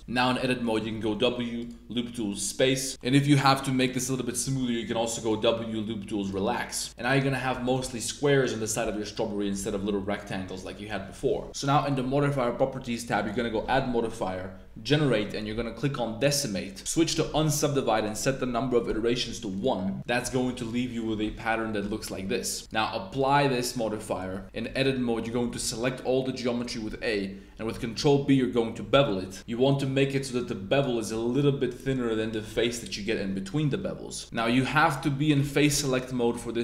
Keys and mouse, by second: 0.1 shift+middle click, 0.6 middle click, 0.8 w, 2.9-3.6 middle drag, 4.0 middle click, 4.4 w, 6.9 z, 6.9 click, 7.6 shift+super+click, 7.8-8.4 middle drag, 8.5 click, 9.0 click, 9.6 s, 9.7 z, 10.1 middle click, 11.3 super+z, 11.5 Tab, 11.8 click, 13.2-16.2 drag, 17.0 click, 18.1-19.5 drag, 20.0 middle drag, 20.4-21.0 middle drag, 22.6-23.2 middle drag, 24.4 Tab, 24.6-24.9 middle drag, 25.0 3, 25.2 a, 25.5 a, 26.0-26.8 middle drag, 26.9 middle click, 27.9 super+b, 30.7 shift+click, 34.5 super+z, 35.0 3, 35.6 super+b.